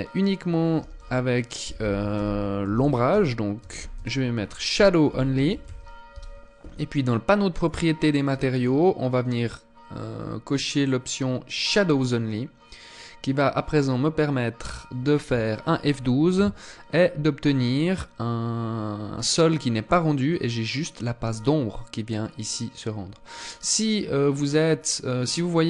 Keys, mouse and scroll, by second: 7.0 click, 10.9 click, 12.3 click.